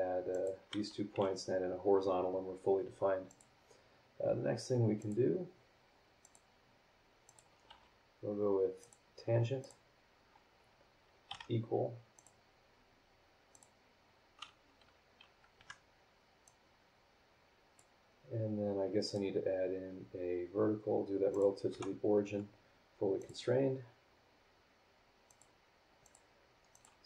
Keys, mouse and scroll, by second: 0.3 click, 1.1 h, 3.3 click, 5.0 click, 6.2 click, 7.2 click, 7.7 t, 8.8 click, 9.6 click, 11.3 e, 12.1 click, 13.5 click, 15.6 Escape, 16.4-18.0 drag, 19.0 click, 21.3 click, 21.7 v, 23.2 click, 25.3 click, 26.0 click, 26.7 click.